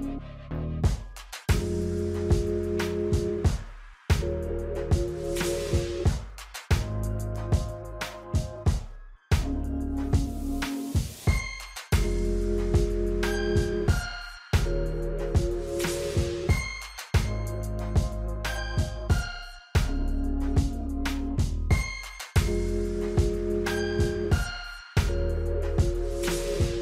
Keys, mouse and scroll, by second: 1.9 alt+scroll down 1, 3.0-3.4 alt+scroll up 3, 4.4-7.7 drag, 8.5 alt+scroll down 1, 9.8 scroll down 1, 10.3 scroll up 1, 12.1 scroll down 1, 12.3 F9, 13.0 alt+scroll up 1, 13.6 space, 13.8 click, 14.0 space, 15.6 right click, 16.6 click, 19.0-26.8 drag.